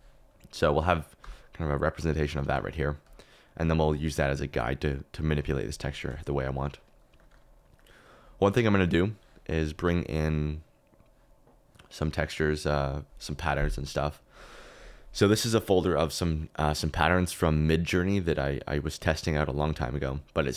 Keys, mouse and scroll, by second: 1.2 g, 2.4 Escape, 3.0 click, 7.1 click.